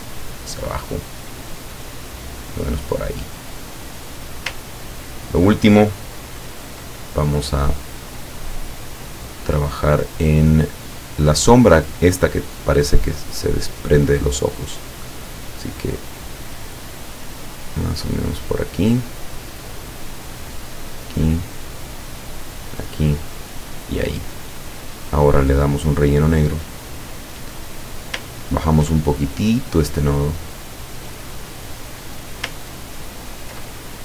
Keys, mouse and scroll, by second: 4.8 ctrl+scroll up 2, 11.7 click, 14.8 click, 16.1 click, 19.0 click, 20.9 click, 22.5 click, 23.5 click, 25.9 click, 27.8 click, 28.4-28.9 ctrl+scroll up 2, 29.7-32.6 drag, 32.8-33.2 ctrl+scroll down 2, 33.3 ctrl+scroll down 2.